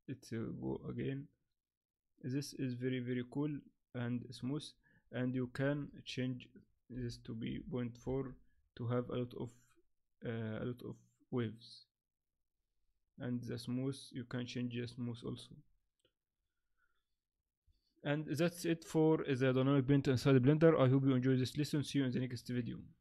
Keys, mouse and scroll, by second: 5.9 shift+click.